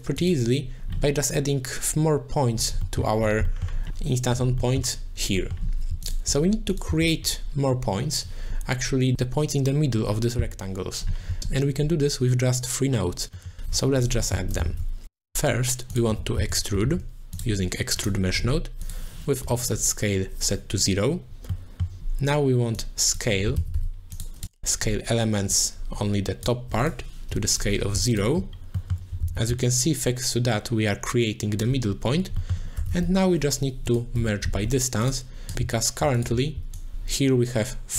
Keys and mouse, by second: 0.2 click, 2.9 middle click, 3.7 middle click, 4.8 middle click, 5.5 middle click, 6.0 alt+shift+click, 6.9 z, 14.8 shift+a, 18.9 click, 21.7 middle click, 22.8-24.2 drag, 24.4 click, 25.5 click, 26.8 click, 28.1 alt+shift+click, 28.7 middle click, 29.2 ctrl+z, 29.7-31.6 shift+drag, 32.4 middle click, 32.9 shift+a, 35.1 shift+a, 36.2 alt+shift+click, 36.9 shift+click.